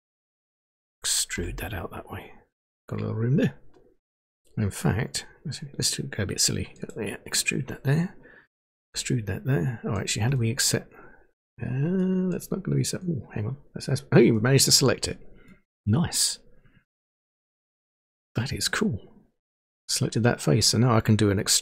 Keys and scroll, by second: 1.4 e, 8.7 e.